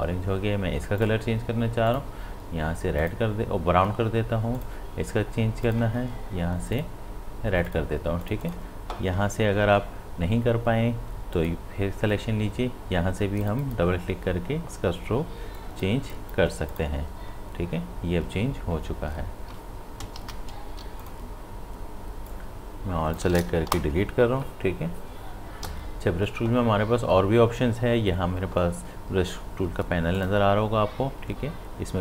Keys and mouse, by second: 11.4 click, 20.0 click, 20.2 ctrl+z, 20.7 v, 21.0-25.4 drag, 25.6 b, 30.1 click.